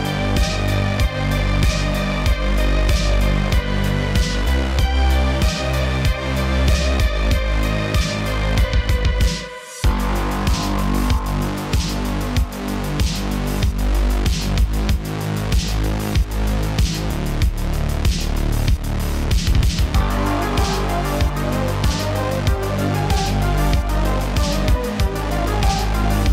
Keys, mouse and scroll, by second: 0.5 click, 1.4 click, 2.2 click, 3.1 shift+a, 6.3 click, 6.8-9.5 drag, 10.9 click, 12.5 click, 13.8 click, 14.4 click, 15.6 click, 16.3 scroll down 5, 16.5 middle click, 17.0 click, 17.3 g, 18.1 click, 18.5 drag, 19.1 g, 19.9 click, 20.2 middle click, 20.8 shift+a, 23.6 click, 25.8 click.